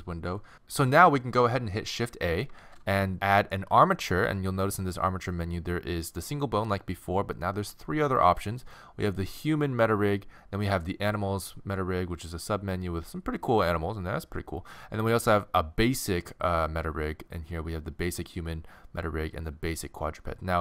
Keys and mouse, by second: 2.6 shift+a.